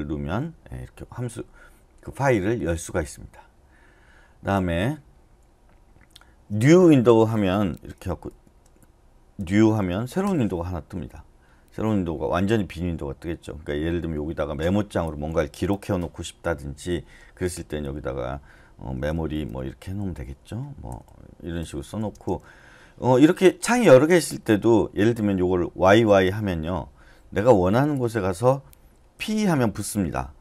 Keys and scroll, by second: 9.1-10.1 typing, 10.2 Return, 15.3 typing, 17.8-22.6 typing, 25.8 y, 29.2 p.